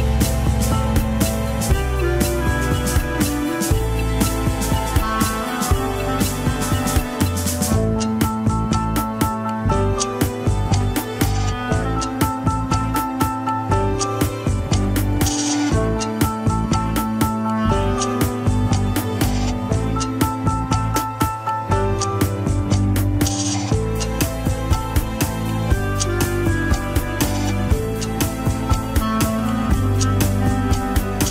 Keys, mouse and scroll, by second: 3.3 ctrl+z, 3.9 ctrl+s, 4.2 scroll up 2, 4.7 shift+z, 5.0-5.3 scroll down 5, 5.3 shift+z, 5.6 click, 6.7 scroll up 2, 7.7 click, 8.5 scroll down 2, 9.0 alt+h, 9.5 click, 9.8 KP_3, 10.8-11.2 scroll up 2, 11.2 click, 13.1 shift+click, 14.0 shift+click, 15.5 shift+h, 16.1 click, 16.7 click, 17.9 click, 19.9 click, 21.1-22.1 drag, 22.8 ctrl+p, 24.6 click, 25.1 scroll up 3, 25.4 middle click, 26.2 shift+click, 26.9 scroll down 1, 27.1 ctrl+Tab, 29.2-31.3 drag.